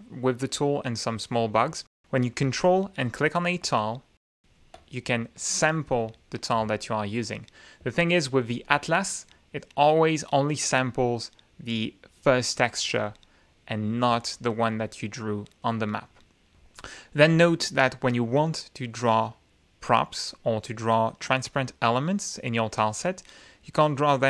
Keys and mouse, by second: 4.4 ctrl+click, 5.1 ctrl+click, 6.6-7.5 drag, 7.7 ctrl+z, 9.6 ctrl+click, 14.0 click, 15.5 ctrl+click.